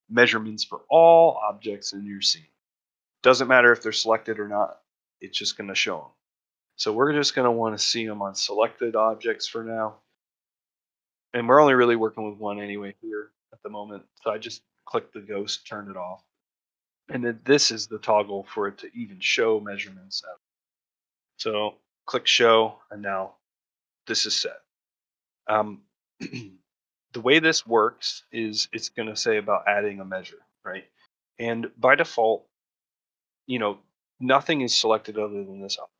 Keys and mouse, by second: 32.6-32.9 middle drag, 33.1 shift+middle drag, 33.6 middle drag, 33.9-34.3 shift+middle drag, 35.4-35.7 shift+middle drag.